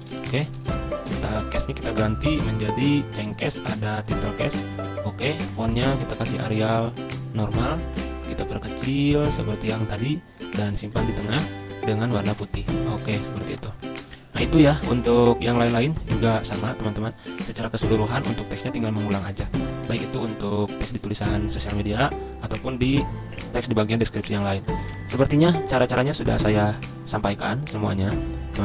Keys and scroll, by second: 0.0-0.7 typing, 0.7 ctrl+a.